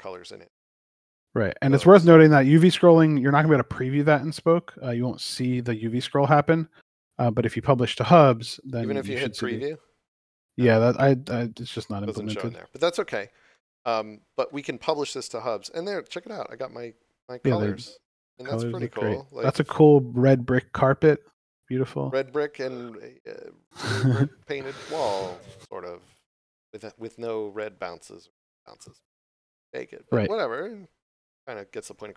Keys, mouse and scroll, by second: 3.2 click, 9.5 click, 13.4 middle click, 14.8 click, 16.1 scroll up 1, 18.7 scroll down 1, 19.2 click, 29.0 scroll down 1, 30.5 click.